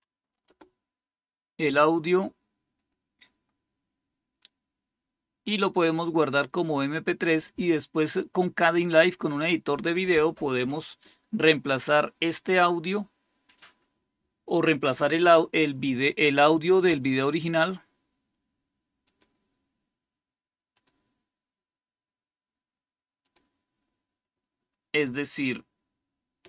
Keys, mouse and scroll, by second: 0.0-0.2 typing, 0.3 Return, 2.7 click, 5.3 click, 18.9 click, 20.6 click, 23.1 click.